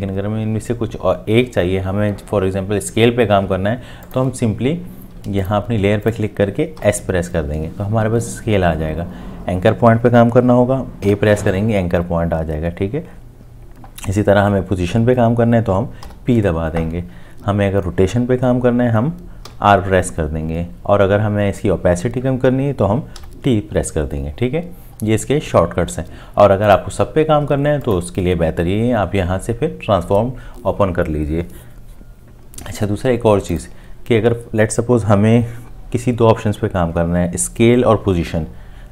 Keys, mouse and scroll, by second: 6.8 s, 11.0 a, 16.0 p, 19.5 r, 23.2 t.